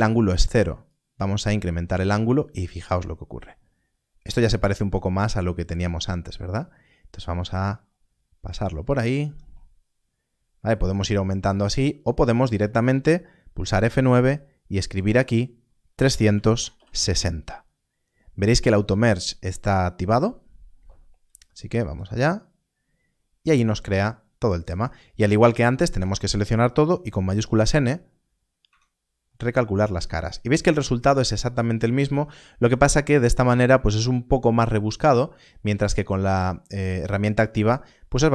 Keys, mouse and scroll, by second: 0.8 F9, 0.8 click, 13.5 F9, 14.9 click, 15.8 Left, 21.7 0, 21.8 Return, 25.3 a, 27.2 shift+n, 28.5 Tab.